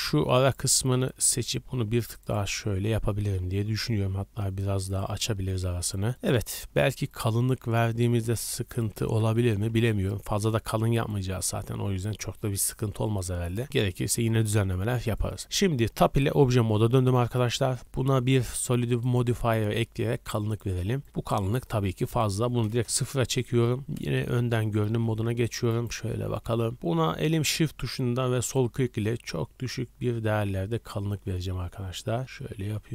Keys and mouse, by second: 0.0-1.3 typing, 3.9 g, 5.4 shift+click, 7.6 b, 8.8 a, 9.0 a, 9.3 b, 11.1-32.9 drag, 14.3 z, 14.9 Tab, 17.8-19.0 middle drag, 24.0 KP_1, 25.0 z.